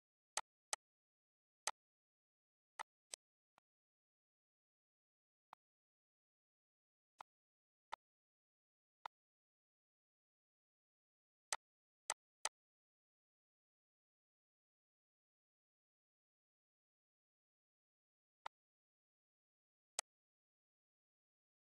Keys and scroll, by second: 1.4 z, 16.7 ctrl+c, 17.8 ctrl+v.